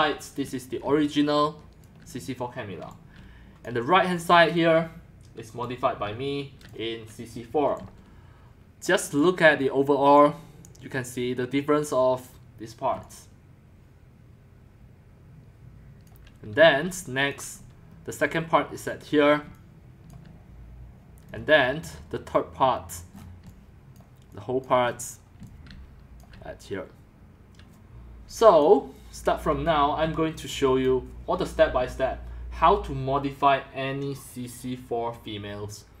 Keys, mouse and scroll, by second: 0.0-1.5 scroll up 1, 0.2-3.6 typing, 1.5 scroll up 1, 1.8 click, 3.7-5.6 drag, 5.6-6.6 typing, 6.8-7.9 drag, 7.9-10.5 c, 9.4-10.5 drag, 10.5-12.9 right drag, 12.9-16.2 c, 16.1 click, 16.9-17.4 right drag, 17.4 click, 17.6 c, 17.7-19.4 drag, 19.4-21.4 middle drag, 19.5-20.3 typing, 21.4-22.1 typing, 21.9-24.6 middle drag, 23.5-26.5 typing, 25.1 middle click, 25.1-25.6 scroll, 28.6-29.6 drag, 29.4-30.9 typing, 30.8 click, 34.4-36.0 drag.